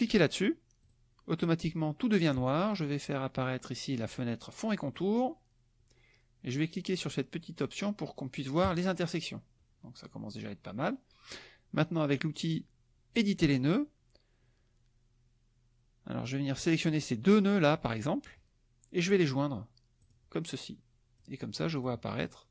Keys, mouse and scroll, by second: 0.8 click, 4.9 click, 8.7 click, 13.1 click, 16.6-18.2 drag, 20.0 click, 21.1 click.